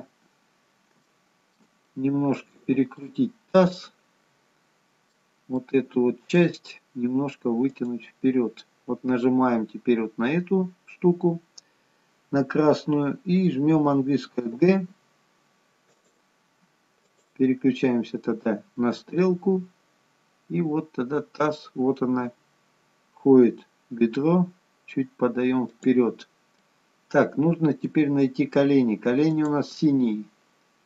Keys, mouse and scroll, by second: 0.0-1.0 scroll down 10, 1.0 scroll up 1, 1.1 shift+middle click, 1.8 middle click, 3.3-4.0 scroll up 3, 3.8 middle click, 5.6 middle click, 7.7 click, 7.7-8.5 scroll up 2, 17.1 click, 18.9 g, 26.7 middle click, 29.3 click.